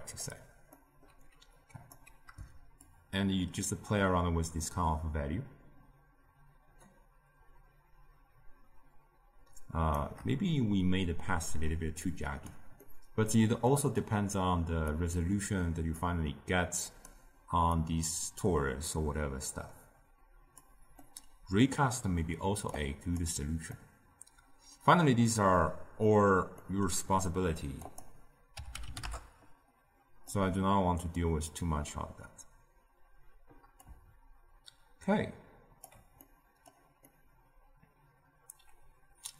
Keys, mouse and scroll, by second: 0.6-1.5 middle drag, 1.5 click, 2.8-5.9 shift+drag, 12.0 click, 12.7-14.8 middle drag, 14.8-17.0 drag, 17.7-20.7 drag, 20.9-22.6 middle drag, 22.6 click, 23.6-27.8 middle drag, 27.8-30.2 drag, 30.2-33.2 middle drag, 33.8-36.1 shift+drag, 36.1-39.3 middle drag.